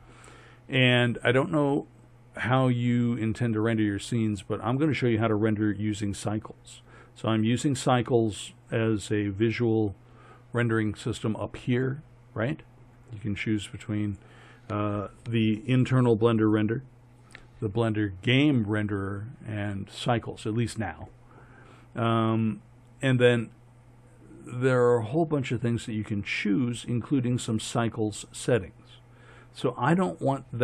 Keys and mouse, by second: 1.1-7.8 middle drag, 14.1-20.2 drag, 27.7-30.6 drag.